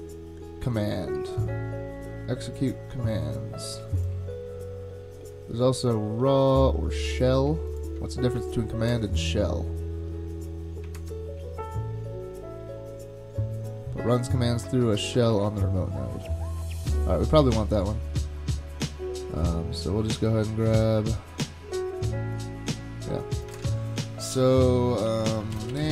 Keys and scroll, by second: 8.9 ctrl+Tab, 10.9 ctrl+Tab, 23.5 super+Tab, 25.3-25.9 typing.